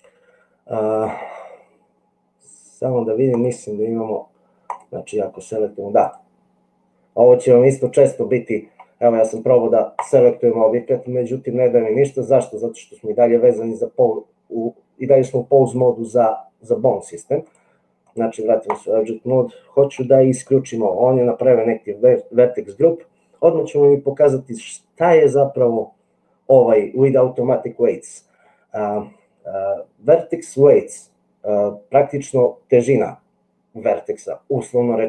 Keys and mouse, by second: 6.2-8.9 drag, 16.1 click, 17.5 click.